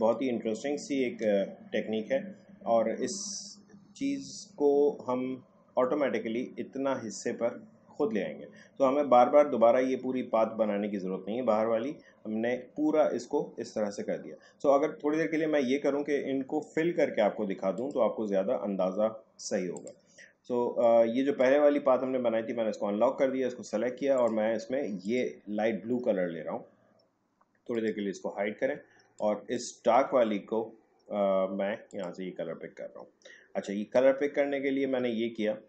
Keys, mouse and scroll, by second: 17.7-23.8 drag, 24.1 click, 27.7 click, 29.2-31.9 ctrl+drag, 33.9 ctrl+z.